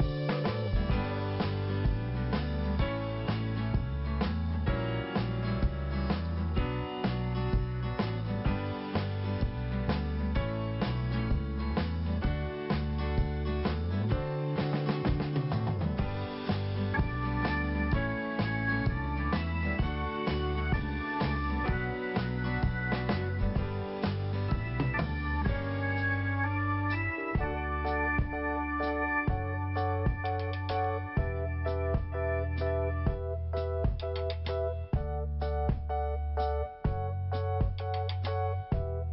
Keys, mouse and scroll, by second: 0.9 5, 2.3 scroll up 1, 7.7 click, 8.4 click, 9.4 click, 13.4 scroll down 1, 18.1 click, 25.0 scroll up 2, 26.1 click, 27.6 click, 28.3 click, 29.7 click, 30.6 click, 32.3 click, 32.7 scroll down 1, 33.8 scroll up 1, 35.8 click, 36.9 click.